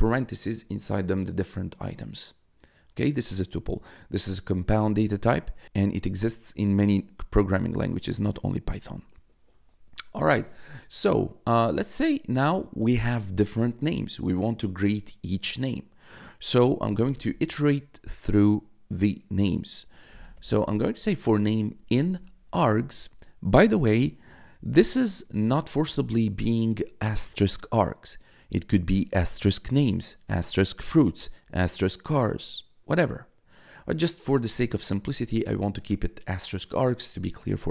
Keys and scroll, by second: 16.3-17.2 typing, 19.8-22.6 typing, 34.5 1.